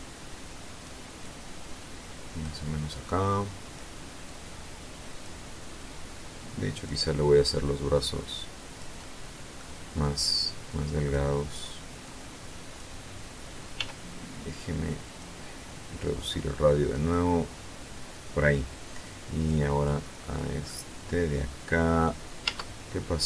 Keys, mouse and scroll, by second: 0.7-2.1 drag, 2.4-3.4 drag, 3.7-4.9 drag, 5.2-6.5 drag, 6.8-8.4 drag, 8.4 middle click, 9.4-10.8 drag, 11.5 click, 12.4 scroll up 1, 13.2 f, 14.5 click, 15.5-16.8 drag, 18.5 click, 19.3 click, 20.1-21.6 drag, 21.9 Tab, 22.8 middle click.